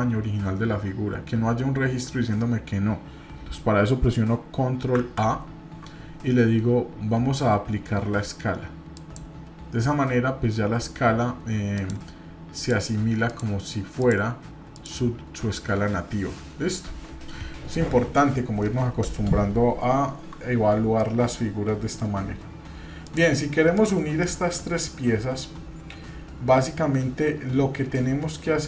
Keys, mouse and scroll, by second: 4.9 ctrl+a, 11.7 click, 12.5 click, 13.2 click, 14.0 click, 14.7 click, 21.0-22.1 middle drag, 23.7-24.1 shift+drag, 24.2-28.6 middle drag.